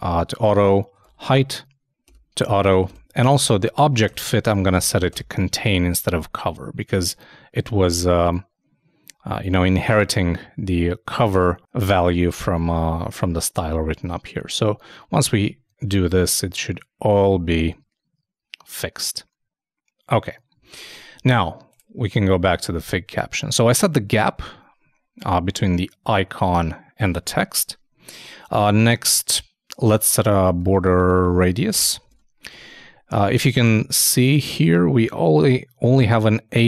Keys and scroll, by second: 14.4 super+s, 15.1 super+Tab, 20.6 super+Tab, 24.1 super+Tab, 27.1 super+Tab, 32.0 super+Return, 32.1 super+Tab, 32.5 super+2.